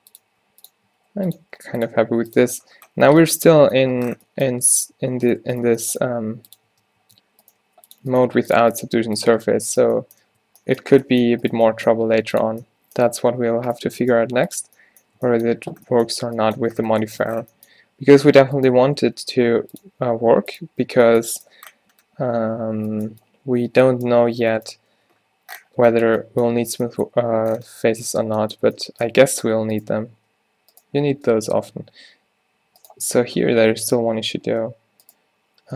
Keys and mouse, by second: 0.0-2.1 typing, 2.5 Tab, 4.9 Tab, 5.4 click, 6.1 g, 6.8 Tab, 7.1 Tab, 7.6 g, 8.3 g, 8.9 g, 9.4 Tab, 10.2 click, 10.3 Tab, 12.0 g, 13.5-15.7 typing, 13.9 click, 14.3 click, 15.3 Tab, 16.8 Tab, 19.4 g, 20.2 r, 24.8 f, 25.1 Tab, 28.2 Tab, 28.7 Tab, 29.2 Tab, 29.8 click, 30.2 g, 31.7 v, 33.3 ctrl+z, 34.7 b, 35.2 click.